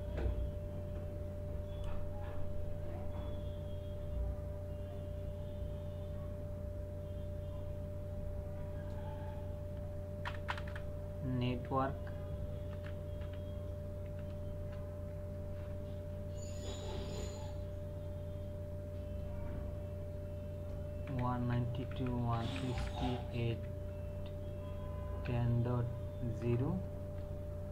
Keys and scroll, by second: 10.2 Return, 12.7-14.6 typing, 21.1-23.5 typing, 25.0 KP_0, 25.3 KP_Decimal, 26.4 KP_0, 27.0 space.